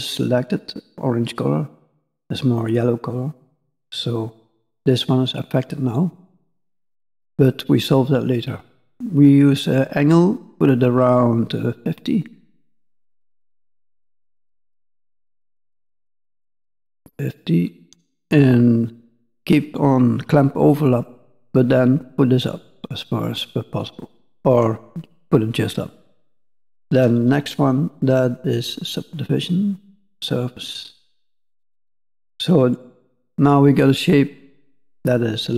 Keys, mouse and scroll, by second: 2.5 middle click, 5.8-8.8 scroll down 4, 8.8 click, 10.1 click, 21.0 click, 25.9-27.1 scroll down 3, 27.1 scroll down 2, 28.9 click, 30.8-31.9 scroll down 2, 30.9 middle click, 32.0 scroll up 1, 32.2 middle click, 34.5 scroll up 2, 35.1 middle click.